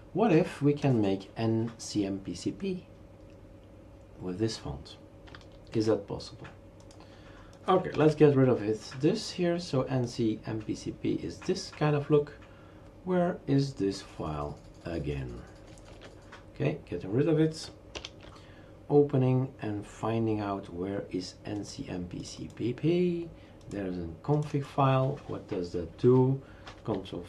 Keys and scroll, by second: 7.9 shift+super+q, 15.9 shift+super+q, 17.9 shift+super+Return.